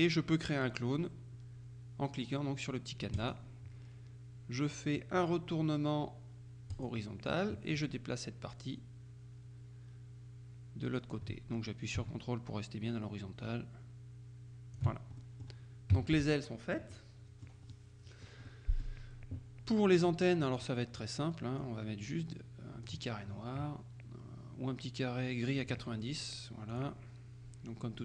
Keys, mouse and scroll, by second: 3.3 click, 6.8 click, 7.8-15.4 drag, 15.3 ctrl+middle click, 16.0 KP_Subtract, 17.0-18.0 drag, 17.0-18.0 middle drag, 18.5 middle click, 20.7 click, 21.7-23.5 drag, 25.7 click, 26.8 click.